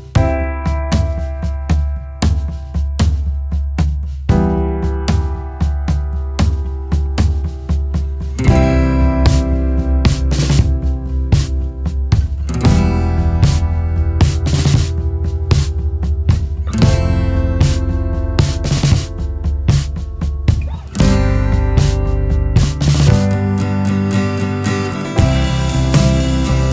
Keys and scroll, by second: 6.9 BackSpace, 20.4 ctrl+space, 20.7 ctrl+space, 20.8 ctrl+space, 20.8-24.1 ctrl+space.